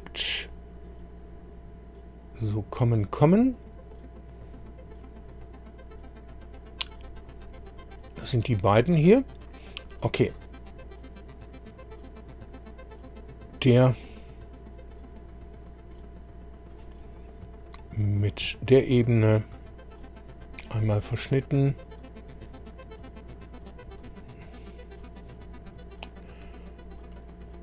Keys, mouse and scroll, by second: 7.8 click, 10.7 scroll down 2, 14.0-14.5 scroll down 2, 15.6 scroll up 2, 18.8 ctrl+click, 23.6 click, 26.0-26.3 scroll down 1, 27.0 click, 27.4 scroll down 1.